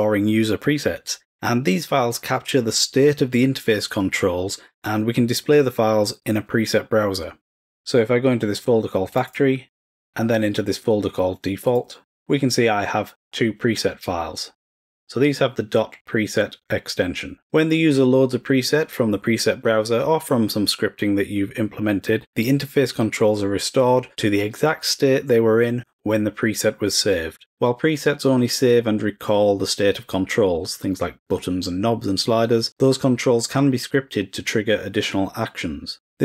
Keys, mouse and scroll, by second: 9.1 click, 9.3 click, 11.6 click.